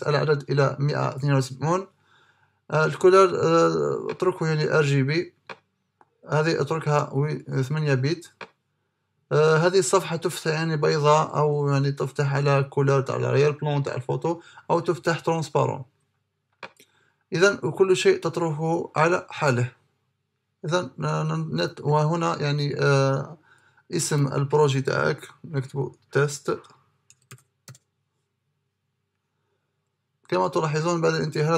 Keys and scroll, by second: 23.5-24.4 typing, 26.2 BackSpace, 26.8 e, 27.3 t.